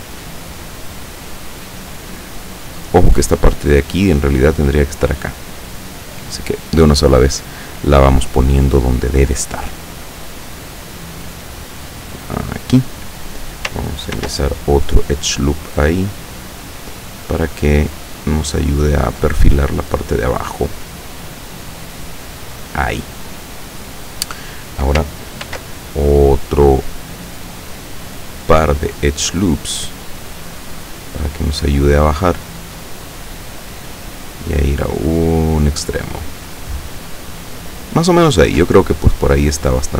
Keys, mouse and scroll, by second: 0.9-2.4 drag, 2.9 right click, 3.4-6.0 drag, 8.9 right click, 9.6-11.5 drag, 12.0 click, 14.2 ctrl+r, 15.2 click, 15.9 click, 16.7 right click, 17.2-18.8 drag, 19.4-20.9 drag, 21.3 click, 25.5 ctrl+r, 27.9 click, 29.0 click, 29.9 right click, 30.7-34.1 drag, 34.5-37.7 drag.